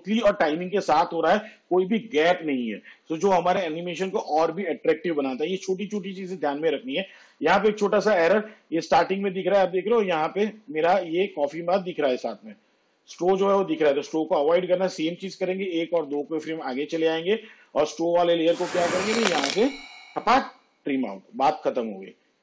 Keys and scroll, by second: 15.6 ctrl+Right, 19.4 alt+[.